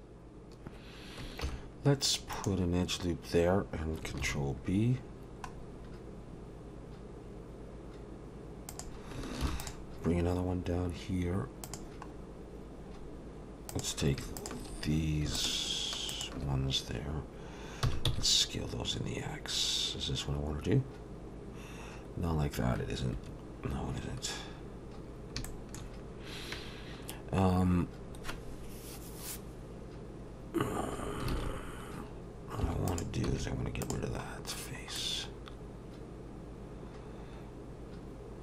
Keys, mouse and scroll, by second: 1.4 ctrl+r, 4.2 ctrl+b, 9.4 ctrl+r, 12.1-12.4 scroll up 2, 12.9-13.7 scroll down 2, 13.7 click, 14.4 shift+click, 15.3 click, 17.8 s, 24.8-25.4 scroll up 1, 25.4 shift+middle click, 28.1-28.4 scroll up 2, 31.3 alt+a, 31.6-32.6 scroll down 1, 32.6 3, 32.9 click, 33.3 x, 34.5-35.0 scroll down 2, 35.0 middle click.